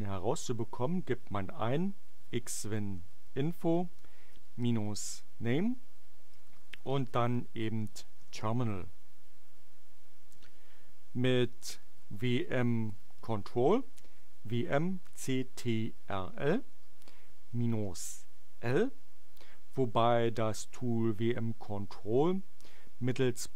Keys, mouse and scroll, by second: 1.5-8.2 typing, 11.5-13.6 typing, 16.6 space, 16.9 -, 17.8 l.